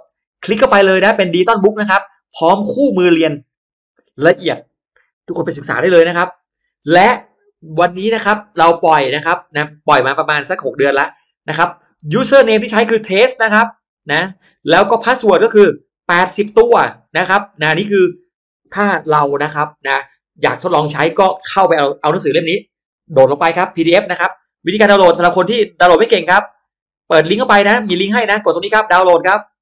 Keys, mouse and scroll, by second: 25.8 click.